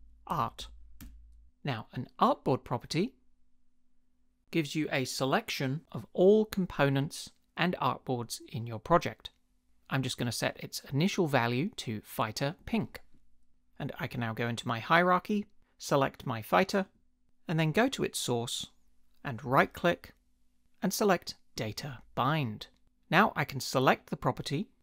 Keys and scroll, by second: 0.0-1.1 typing.